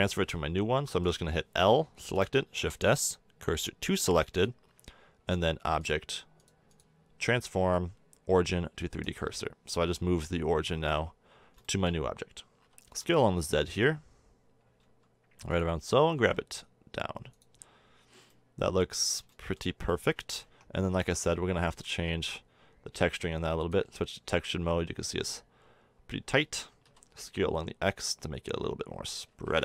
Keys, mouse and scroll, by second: 0.8 l, 2.3 shift+s, 4.7 Tab, 11.8 middle drag, 12.6 s, 16.0 g, 20.4 Tab, 20.7 a, 21.0 a, 23.1-23.4 drag, 26.8 s, 29.3 a, 29.4 Tab.